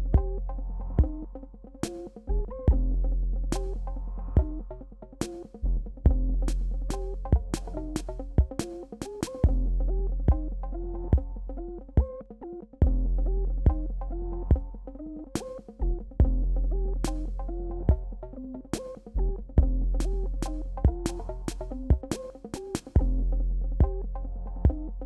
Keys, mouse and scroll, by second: 1.4-4.9 drag, 5.1 click, 6.4 alt+scroll down 1, 7.0 alt+scroll up 1, 8.6 space, 8.9 click, 9.0 space, 10.7 click, 12.1 alt+scroll down 1, 12.3 click, 12.8 shift+x, 13.0-14.1 drag, 14.1 space, 14.3 click, 14.4 space, 15.5-17.1 drag, 21.6-22.2 alt+scroll down 2, 24.0 space, 24.2 click, 24.2 space.